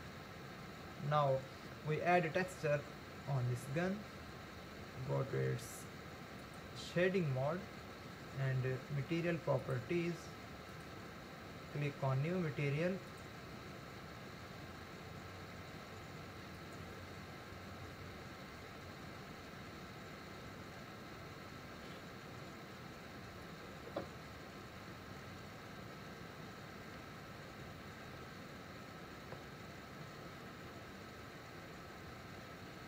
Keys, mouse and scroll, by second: 3.8-5.2 scroll up 1, 6.7 click, 9.6 click, 10.7-24.8 drag.